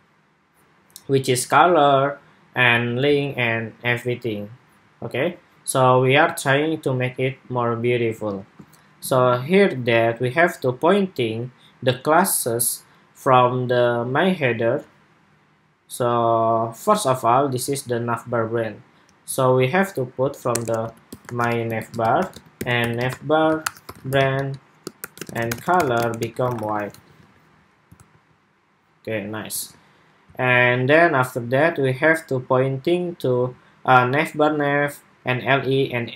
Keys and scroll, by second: 8.0 super+Tab, 26.6 super+s, 26.9 super+Tab, 27.7 super+r, 29.4 super+Tab.